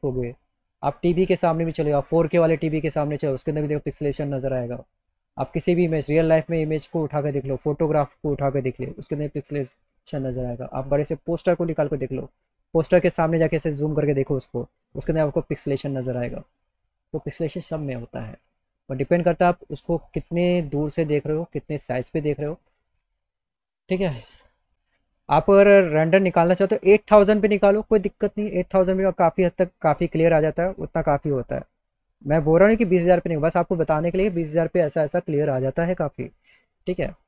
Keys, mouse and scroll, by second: 4.5 click, 9.8 click, 9.8 right click, 16.9 click, 24.3 click, 24.7 Tab, 26.0 click, 26.5 click, 32.2 click, 36.8 click.